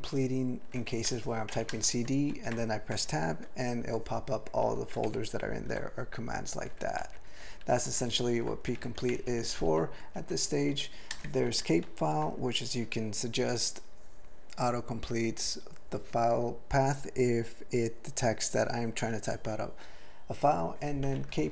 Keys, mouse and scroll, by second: 0.9 ctrl+p, 1.2 typing, 2.3 ctrl+g, 2.9 Tab, 5.1 ctrl+/, 7.0 ctrl+n, 7.3 ctrl+n, 7.6 ctrl+f, 8.0 ctrl+p, 8.1 ctrl+e, 8.8 ctrl+p, 9.1 alt+f, 9.4 alt+f, 9.6 alt+f, 10.2 ctrl+alt+f, 10.7 ctrl+f, 11.1 ctrl+space, 11.4 ctrl+alt+f, 11.8 ctrl+g.